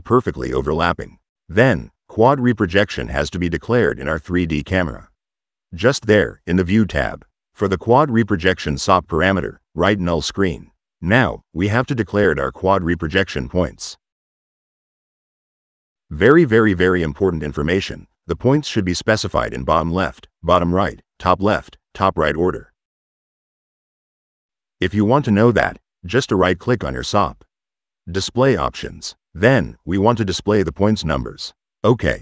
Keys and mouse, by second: 3.7 click, 5.3 click, 8.1 middle click, 8.3 click, 10.5-12.5 drag, 25.4 middle click, 26.3 click, 26.8 click, 28.3 click, 31.8 click.